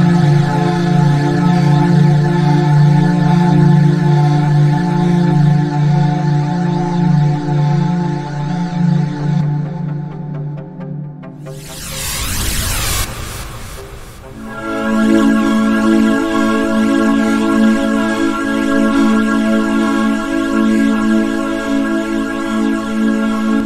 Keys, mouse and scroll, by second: 0.2 click, 0.6-2.9 drag, 3.7-4.3 drag, 13.6 click, 17.4 click, 17.9 click, 18.9 click.